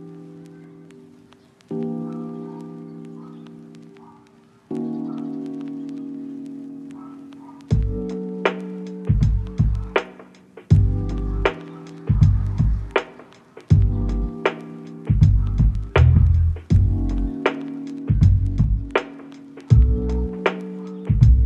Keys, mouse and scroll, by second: 1.2 middle click, 3.6 middle click, 5.0 middle click, 5.5 double click, 6.0 middle click, 6.9 middle click, 8.3 middle click, 9.0 middle click, 10.0 middle click, 12.7 middle click, 13.7 middle click, 15.3 middle click, 18.2 right click.